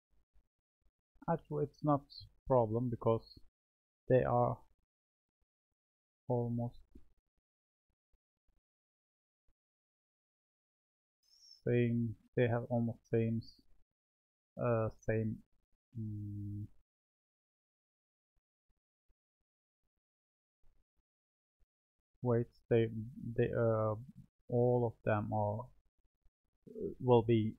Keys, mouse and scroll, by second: 2.9-7.6 middle drag, 7.6 click, 9.0-11.1 middle drag, 11.1 click, 12.7 click, 19.3-23.1 middle drag, 23.1 click.